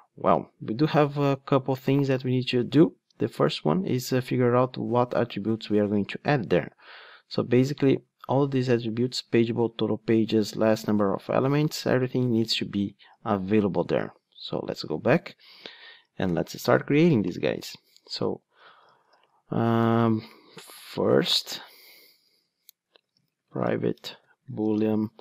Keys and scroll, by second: 16.0 Tab.